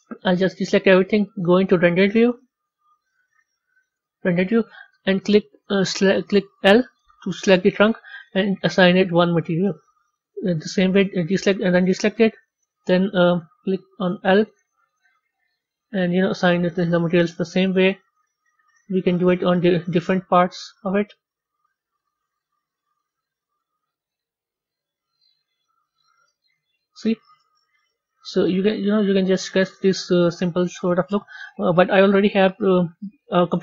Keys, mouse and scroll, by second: 3.2-4.2 middle drag, 4.2-6.2 scroll up 3, 8.3 click, 9.2 click, 15.0 click, 15.5 click, 16.2 click, 18.6-19.1 scroll down 2, 19.1-20.2 middle drag, 21.5-22.8 middle drag, 24.7 click, 25.6 click, 26.7 middle click, 27.6 Tab, 28.2-33.3 middle drag.